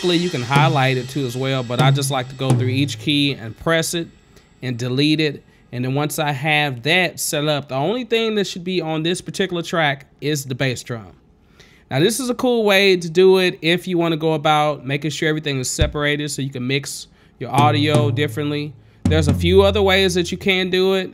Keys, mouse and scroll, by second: 0.1 click, 0.8 click, 2.1 click, 2.8 click, 4.8-7.1 drag, 7.4-9.1 scroll, 9.3-9.8 scroll up 3, 10.6-12.9 drag, 13.4-14.5 scroll up 5, 16.0 click, 16.5-17.1 scroll up 6, 17.8 click, 18.2 click, 19.3 click, 19.6 click.